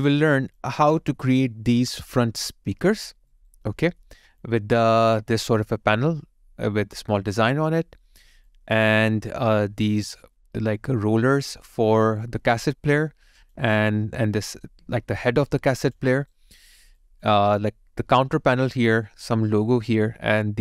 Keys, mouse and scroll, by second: 0.3 alt+click, 0.8 alt+middle click, 3.3 alt+right click, 3.7 alt+middle click, 4.1 alt+click, 7.4 alt+right click, 7.9 alt+middle click, 8.4 alt+click, 9.0 alt+right click, 12.2 alt+right click, 12.7 alt+click, 15.3 alt+click, 16.1 alt+right click, 16.6 alt+middle click, 16.9 alt+click, 18.5 alt+right click.